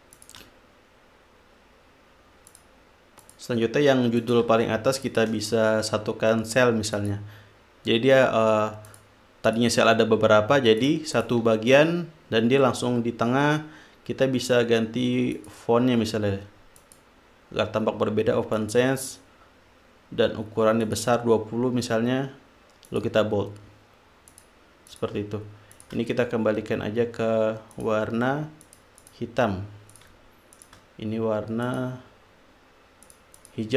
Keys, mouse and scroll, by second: 0.5 shift+click, 2.9 click, 3.6 click, 4.5 shift+click, 5.4-5.9 shift+drag, 7.3 click, 9.3 click, 9.9 click, 11.2-11.9 drag, 15.7 click, 17.1 click, 18.9 click, 21.2 click, 23.3 click, 24.7 click, 25.3 click, 26.1-26.8 shift+drag, 28.1 click, 29.0 click, 30.3 shift+click, 30.9 shift+click, 32.0-32.7 drag, 33.4-33.7 drag.